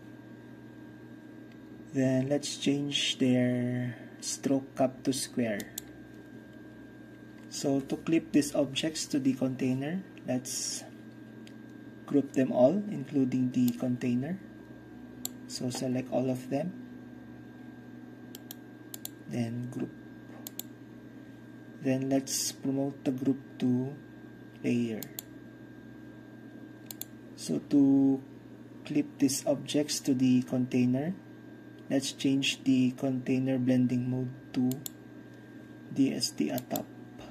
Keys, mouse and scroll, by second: 5.7-7.5 middle drag, 13.8 middle click, 14.5-17.5 drag, 18.4 click, 18.6-19.6 right drag, 19.0-19.6 drag, 19.6-19.9 middle drag, 19.9-21.1 drag, 19.9-20.6 right drag, 25.1-26.0 drag, 27.0-28.1 drag, 34.8-35.6 drag, 36.7-37.3 drag.